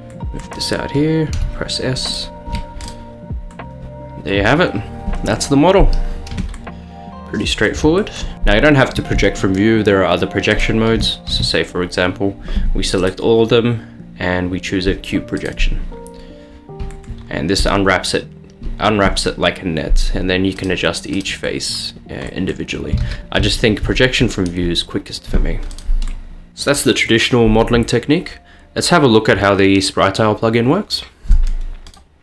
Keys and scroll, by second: 1.4 s, 2.5 Tab, 11.0 Tab, 11.4 a, 23.1 ctrl+z, 23.5 ctrl+z, 26.5 Tab.